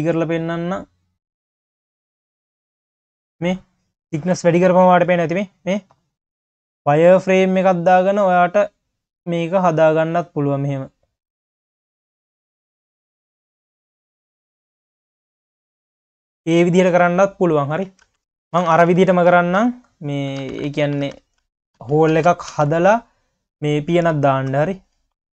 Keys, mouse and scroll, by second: 3.7 scroll down 1, 4.0 q, 5.2 q, 7.7-15.2 drag, 16.4 scroll down 1, 16.5 q, 18.1 ctrl+z, 18.3-18.8 ctrl+z, 19.0 ctrl+z, 19.3 q, 20.4 ctrl+z, 20.9 ctrl+z, 21.1 ctrl+z, 21.4 ctrl+z, 21.8 ctrl+z, 22.1 ctrl+z, 22.5 ctrl+z, 23.1 click, 23.8-24.3 scroll up 2, 24.3 shift+click, 24.8 scroll down 1, 25.0 q.